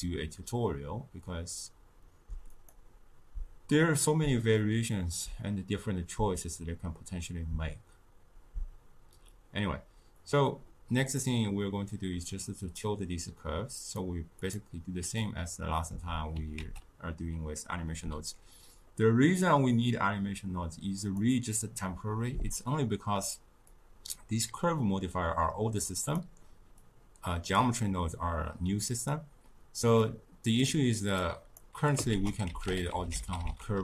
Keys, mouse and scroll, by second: 2.4-5.6 drag, 11.1-13.7 middle drag, 13.7-15.1 drag, 15.1-16.5 middle drag, 16.5 ctrl+a, 23.6-26.1 drag, 26.7 click, 30.0-31.1 middle drag, 31.1 click, 32.1 ctrl+a.